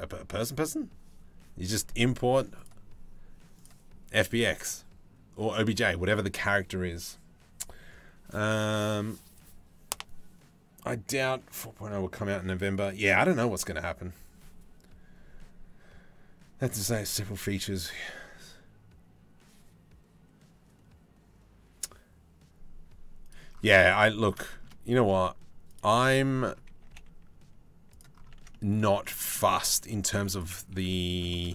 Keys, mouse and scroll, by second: 2.2-22.7 drag, 22.8 click, 23.6 middle click, 24.1 shift+middle click, 25.3 click, 26.4 g, 27.9 Tab, 28.1 middle click, 28.6 shift+middle click, 28.8 middle click, 29.1 Tab, 29.7 4, 29.7 4, 29.9 middle click, 30.5 middle click, 30.9 shift+middle click.